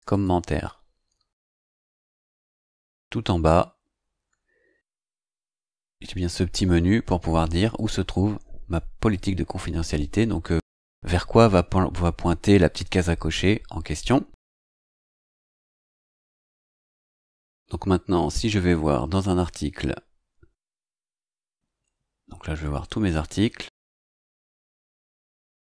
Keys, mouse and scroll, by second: 0.0 click, 3.0-5.1 scroll down 10, 7.7 click, 9.0 click, 14.1-14.5 scroll down 2, 18.6-18.9 scroll up 2, 20.9 click, 25.4 right click.